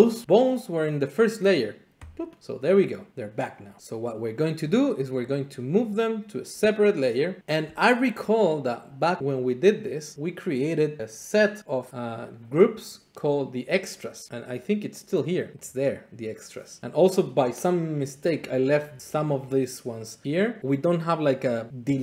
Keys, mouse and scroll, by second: 2.1 click, 3.8 middle click, 4.8-6.9 drag, 7.6-8.7 drag, 15.5-16.7 drag, 18.5 click, 20.2 click, 21.7-22.0 drag.